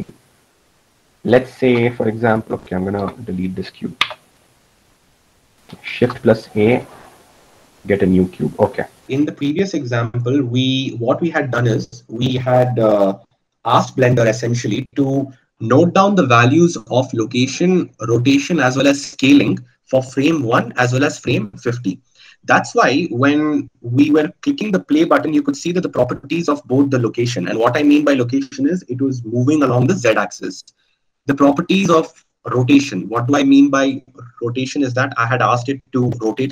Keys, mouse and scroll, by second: 3.7 x, 7.2 shift+a.